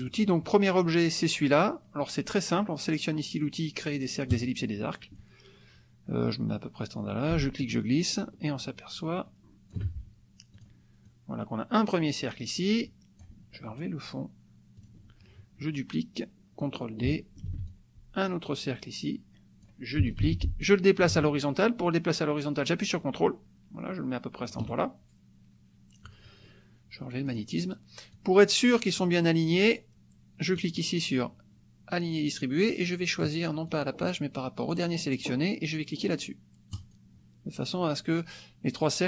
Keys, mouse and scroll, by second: 4.4 click, 7.3-9.9 ctrl+shift+drag, 10.5 click, 11.0-13.4 drag, 14.7 click, 17.4 ctrl+d, 17.7-19.9 ctrl+drag, 20.2 ctrl+d, 20.6-24.7 ctrl+drag, 27.2 click, 28.1-29.2 drag, 30.5 click, 33.7-34.9 drag, 36.7 click.